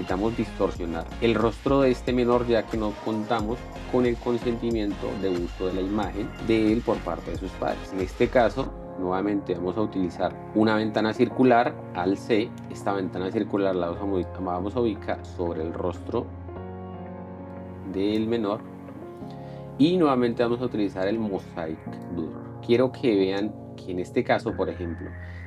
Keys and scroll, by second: 12.5 alt+c.